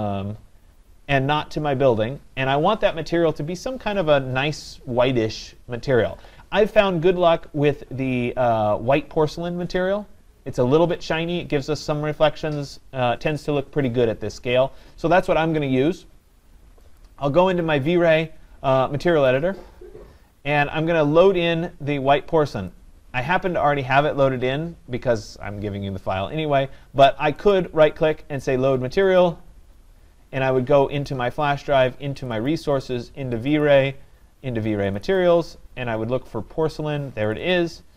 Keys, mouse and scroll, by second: 17.0 click, 19.4 click, 22.7 click, 27.5 right click, 29.2 click, 31.1 click, 32.3 click, 32.5 click, 33.5 click, 33.7 click, 35.0 click, 35.2 click, 37.4 click, 37.5 click.